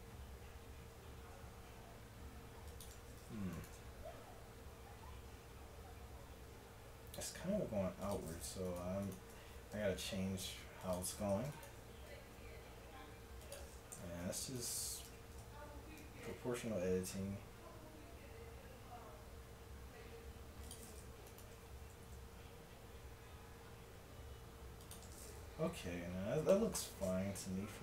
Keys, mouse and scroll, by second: 3.6-5.3 drag, 5.3 middle click, 7.1 s, 8.7-10.8 drag, 9.8 s, 11.5-13.9 drag, 12.3 s, 13.9 g, 15.1 o, 16.3 g, 21.3-24.8 drag, 22.1 s, 26.2-27.5 drag, 27.4 a, 27.5 Tab.